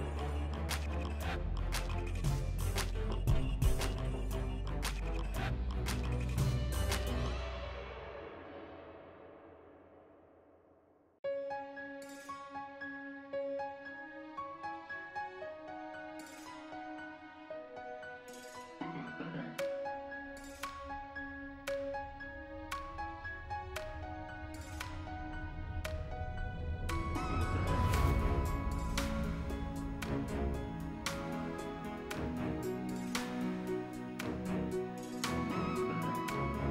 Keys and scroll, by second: 2.6 4, 3.0 1, 3.3 Return, 5.6 alt+q, 9.9 m, 13.9 BackSpace, 13.9 1, 14.0 Return, 16.8 c, 18.1 f, 26.2-27.2 typing.